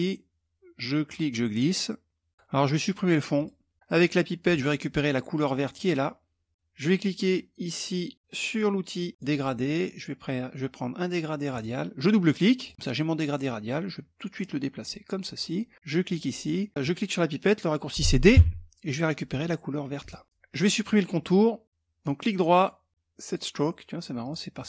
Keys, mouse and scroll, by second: 0.6-2.3 drag, 2.9 click, 4.0 click, 5.3 click, 8.8 click, 11.1 click, 12.1 click, 14.0-15.3 drag, 15.7 click, 17.9 d, 19.5 click, 21.6 right click, 22.9 click, 23.8 click.